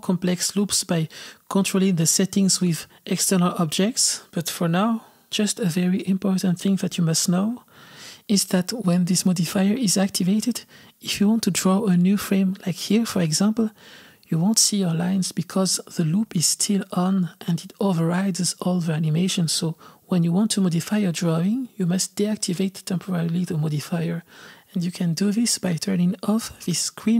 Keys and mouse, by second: 0.6-2.2 drag, 11.7-12.9 drag, 13.3-14.9 drag.